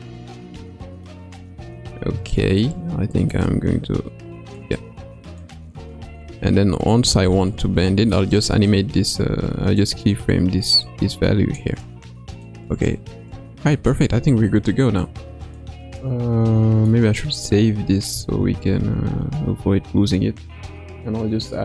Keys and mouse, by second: 3.4-4.6 drag, 5.3-6.3 drag, 7.5-8.1 middle drag, 9.8-11.6 drag, 12.4 click, 15.1 click, 16.9-18.3 middle drag, 18.7 ctrl+s.